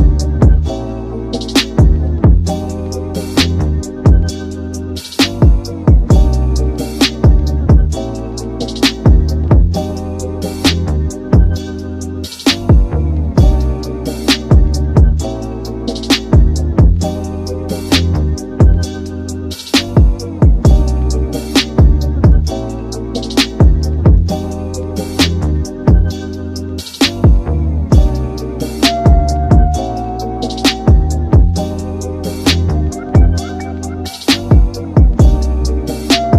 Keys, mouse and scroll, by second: 1.8-7.5 drag, 9.8 click, 10.2-11.1 drag, 11.5-12.1 drag, 12.9 click, 13.3 click, 14.6-15.2 drag, 15.2-17.0 scroll down 6, 17.0 click, 20.1 F12, 24.3 click, 25.5 click, 25.9 click, 26.7 F12, 29.4 F12, 30.4 click, 31.2 F12, 33.8 F12, 34.6 click, 35.9-36.3 drag.